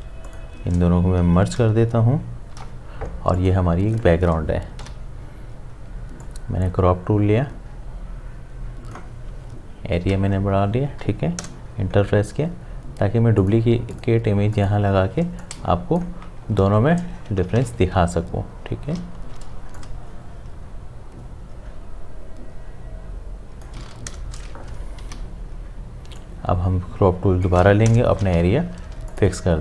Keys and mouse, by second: 0.3 shift+click, 2.5 ctrl+e, 3.4 click, 4.8 c, 6.2-10.0 drag, 10.0 v, 11.4 Return, 13.4-16.8 drag, 16.8 ctrl+z, 17.8 v, 19.2 ctrl+t, 19.8-24.1 drag, 24.1 Return, 25.0 c, 26.2-27.9 drag, 27.9 Return, 28.6 v, 28.9 space, 29.1 ctrl+alt+click.